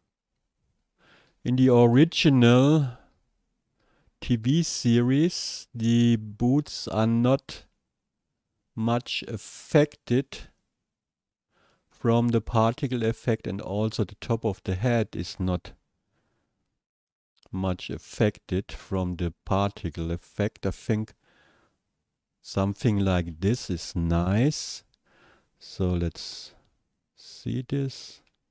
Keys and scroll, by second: 0.1 shift+Down, 0.8 Down, 1.3 Down, 2.5 shift+Down, 3.1 shift+Down, 3.8 shift+Down, 4.4 shift+Down, 5.2 shift+Down, 6.0 shift+Down, 9.4 shift+Down, 14.0 Down.